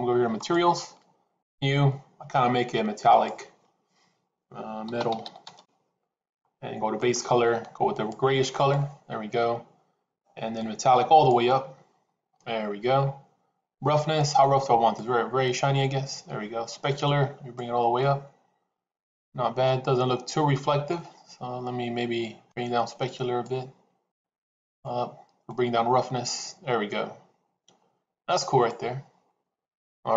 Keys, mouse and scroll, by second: 0.3 click, 1.2 click, 2.9-6.2 drag, 6.8 click, 10.4-11.5 drag, 14.2 click, 17.0 click, 17.9-20.8 middle drag, 22.4-23.4 drag, 24.0 click, 25.4-28.6 drag.